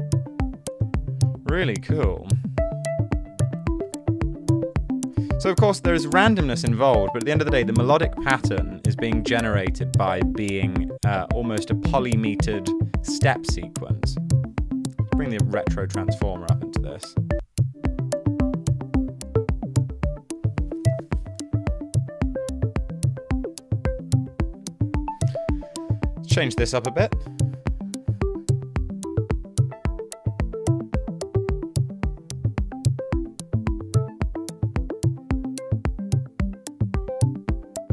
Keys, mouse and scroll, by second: 4.2-6.6 typing.